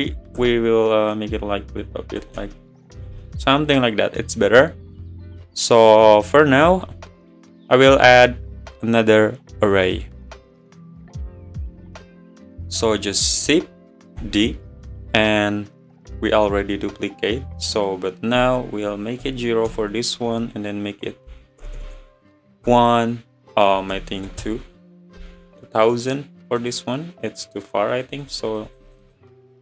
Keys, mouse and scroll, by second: 3.5-5.0 middle drag, 5.0 click, 5.4-6.3 middle drag, 6.3 click, 6.8 `, 8.2 click, 14.2 shift+d, 15.0-15.5 scroll down 10, 17.8-20.8 drag, 20.9 click, 21.8 BackSpace, 26.0-27.9 middle drag, 27.9-29.6 drag.